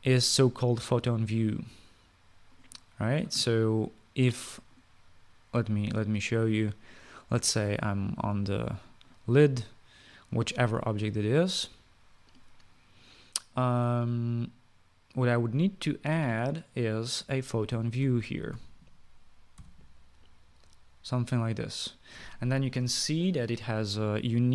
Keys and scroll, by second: 18.2-20.3 typing.